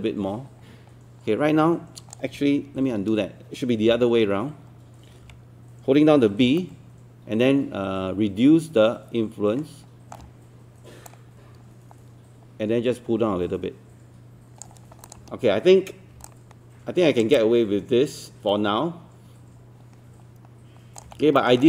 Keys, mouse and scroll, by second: 2.8 z, 6.4-7.5 typing, 6.6 middle click, 11.1-15.1 drag, 16.3 alt+click, 17.4-21.0 alt+drag, 21.4 alt+middle click.